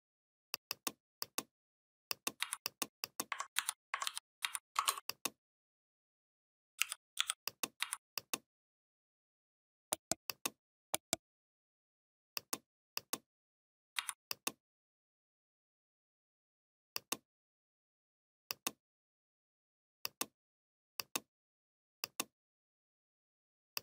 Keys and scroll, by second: 2.2 v, 3.4 ctrl+c, 3.9 ctrl+f, 4.2 v, 6.6 u, 7.0 i, 7.6 v, 13.8 v.